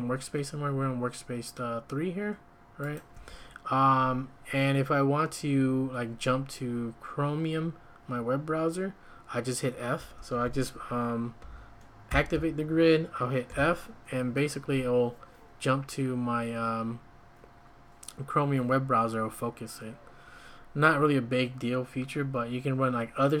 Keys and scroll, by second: 3.1 `, 9.9 `, 12.1 ctrl+;, 13.5 f.